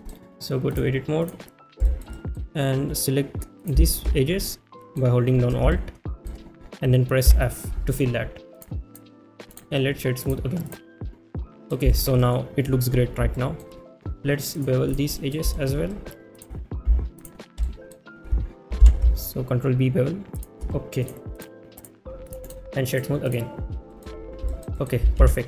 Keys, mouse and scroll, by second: 0.0 middle drag, 0.7-1.3 drag, 1.8 shift+middle click, 2.1 middle drag, 4.4-4.9 middle drag, 5.7 shift+middle click, 7.3 f, 8.6-8.9 drag, 10.3-10.7 right drag, 11.5 middle drag, 11.9 shift+middle drag, 12.2 middle drag, 13.3 shift+middle drag, 14.6 click, 15.2 middle click, 15.5 shift+middle click, 17.2 alt+click, 17.6 middle drag, 20.4 ctrl+shift+b, 20.4 shift+click, 21.0 click, 21.8 click, 23.0 right click, 23.3 click, 23.9 middle drag, 24.5 shift+middle drag, 24.7 middle drag.